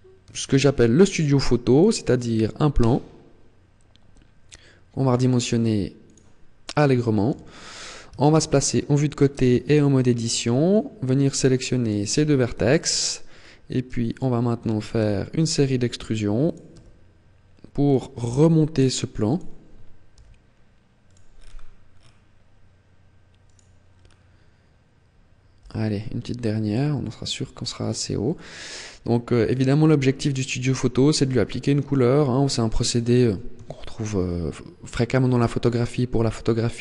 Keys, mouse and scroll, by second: 0.3 shift+a, 2.6 s, 6.0 click, 7.1 KP_3, 8.0 shift+middle click, 9.2 Tab, 9.6-10.0 scroll up 3, 10.2 middle click, 11.0 right click, 11.6 shift+right click, 12.4 KP_3, 13.1 scroll down 3, 13.8 shift+middle click, 14.8 e, 16.4 click, 16.6 e, 17.9 click, 18.1 e, 19.7 click, 20.9 click, 23.2 right click, 23.6 scroll down 5, 25.4 e, 27.8 click, 28.0 middle click, 32.4 scroll down 2, 32.6-33.2 scroll up 6, 33.5 shift+middle click, 34.4-34.7 scroll down 2.